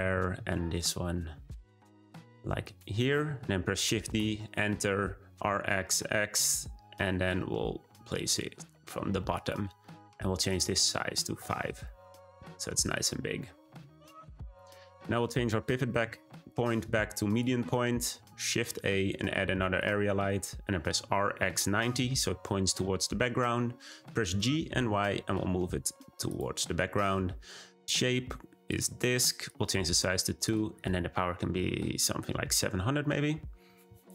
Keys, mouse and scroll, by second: 3.7 shift+d, 5.0 r, 10.4-13.0 drag, 14.0-14.5 middle drag, 14.5-15.9 scroll down 3, 15.9 ., 18.1 shift+a, 20.9 r, 24.2 g, 27.7-30.5 drag, 30.7-32.5 drag, 32.5 0.